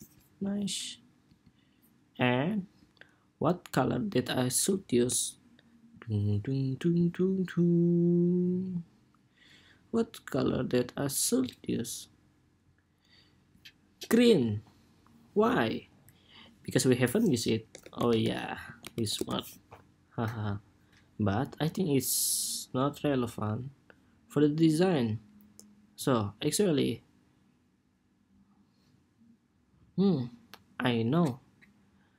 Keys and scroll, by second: 16.0 ⟲.